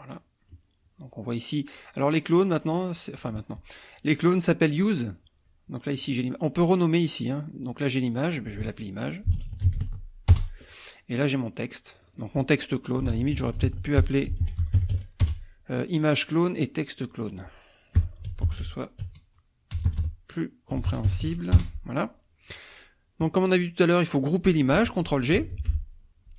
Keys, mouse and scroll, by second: 2.0-9.3 drag, 9.0-10.3 typing, 10.3 Return, 11.4 click, 12.7-15.4 typing, 16.4 click, 17.1 click, 18.0-21.7 typing, 25.5 ctrl+g.